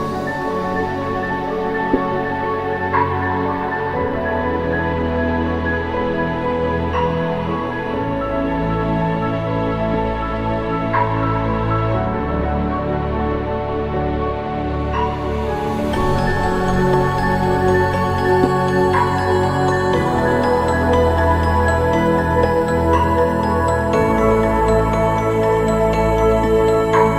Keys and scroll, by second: 9.3 ctrl+t, 21.3 ctrl+g.